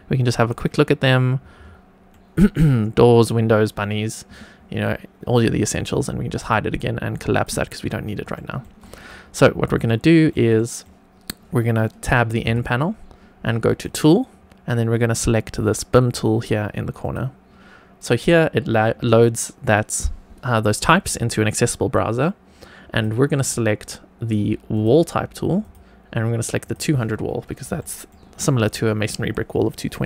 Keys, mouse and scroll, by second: 0.3 click, 1.5-2.0 scroll up 2, 2.0-2.5 middle drag, 6.3 click, 7.2 click, 7.7-8.2 scroll down 2, 8.2 shift+middle drag, 8.7 middle click, 9.8-10.2 shift+middle drag, 10.5 middle click, 12.4 n, 13.6 click, 16.9 click, 22.8-24.8 drag, 25.6-26.6 drag, 27.7 shift+middle click, 28.3 middle click.